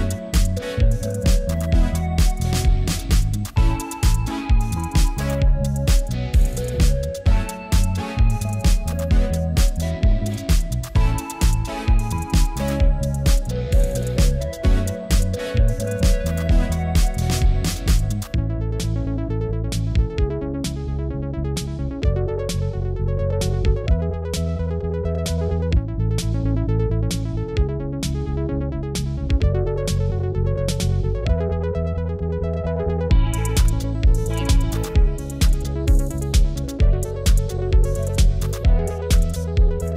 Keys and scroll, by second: 11.6 super+t.